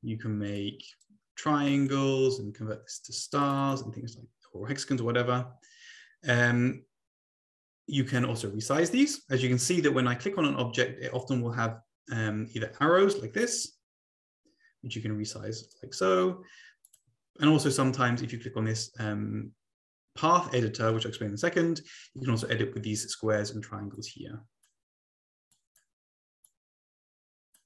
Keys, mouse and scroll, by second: 0.4 click, 1.0 click, 3.2 click, 3.5 click, 10.3 click, 11.1 click, 13.5-15.9 drag, 16.8 click, 23.9-24.7 drag, 25.5 click, 26.4-27.6 drag.